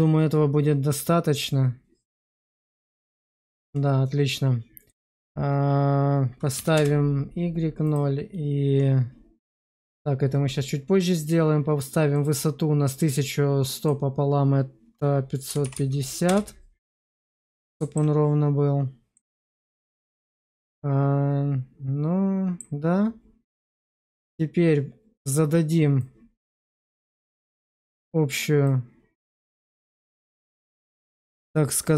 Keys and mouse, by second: 4.7-6.7 drag, 7.8-12.1 drag, 13.7-16.2 drag, 15.5 5, 17.5 alt+middle click, 19.0-22.5 middle drag, 23.7 click, 26.0 click, 27.1-27.5 middle drag, 28.5 click.